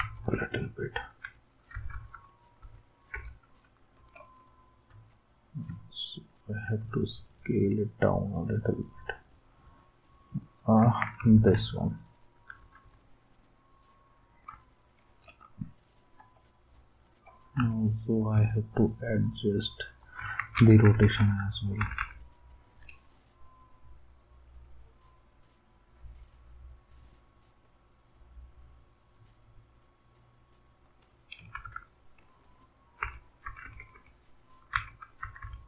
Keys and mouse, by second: 0.1 Down, 0.3-1.1 Down, 1.7 Down, 1.7 Right, 1.9 Right, 2.1 Right, 2.6 Right, 3.1 Left, 4.9 s, 10.8 ctrl+s, 11.3 Down, 11.3 s, 11.5 Down, 12.3 Down, 12.6 Down, 12.8 Down, 13.6 typing, 16.2-17.0 typing, 20.2 ctrl+s, 20.5-21.2 typing, 21.8 Down, 22.0 Down, 31.5 Up, 31.8 Up, 33.0 Left, 33.4 Left, 33.6 Left, 33.8 Left, 33.9 Left, 34.7 Right, 35.2 Right, 35.4 Right.